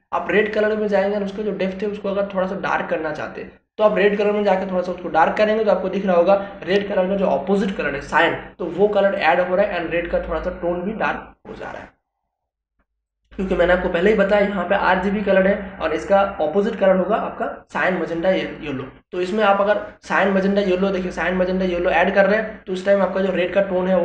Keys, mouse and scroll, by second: 0.6-8.4 drag, 8.4-18.4 drag, 20.5-24.0 drag.